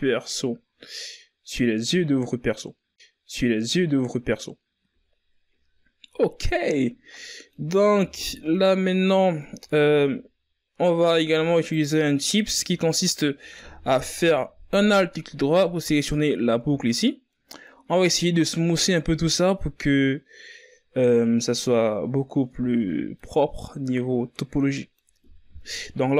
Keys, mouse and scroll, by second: 5.2-5.7 middle drag, 5.7-6.0 scroll up 4, 6.0 Tab, 6.2 middle click, 6.8 scroll up 1, 7.2-9.7 middle drag, 9.7 click, 11.0 alt+right click, 13.2-19.7 middle drag, 21.2-24.6 middle drag, 24.6 ctrl+KP_Add, 25.0 ctrl+KP_Add, 26.0 KP_1.